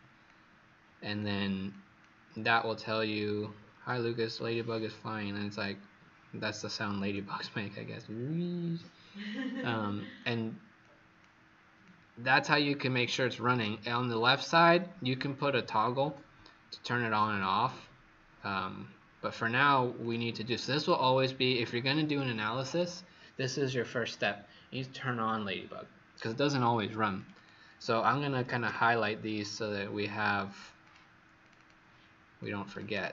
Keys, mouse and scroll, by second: 0.2 click, 10.8 click, 11.8 click, 20.4 click, 21.2 click, 27.3 click, 28.0-29.1 typing, 30.8 click, 31.3 click, 32.3 click.